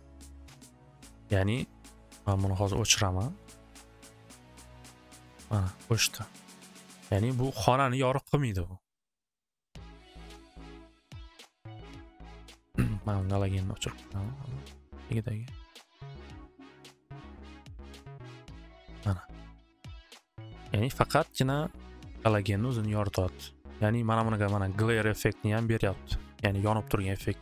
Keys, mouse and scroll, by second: 2.7 click, 4.6 click, 6.8 click, 7.6 middle click, 8.3 middle click, 9.8 click, 10.2 click, 13.1 middle click, 14.1 middle click, 14.9 click, 15.9 click.